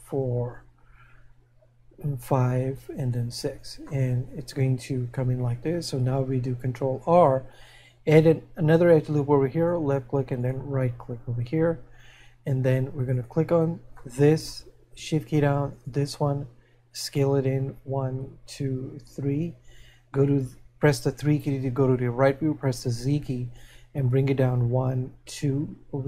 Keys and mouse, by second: 4.4 middle click, 7.0 ctrl+r, 14.3 middle click, 24.2 click.